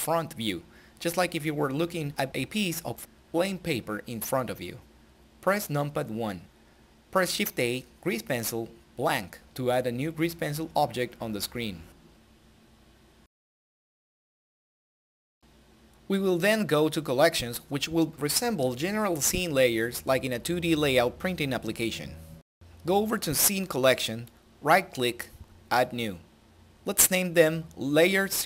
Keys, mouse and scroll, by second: 9.7 shift+Num_Lock, 9.9 shift+a, 11.8 click, 18.9 click, 19.1 ctrl+z.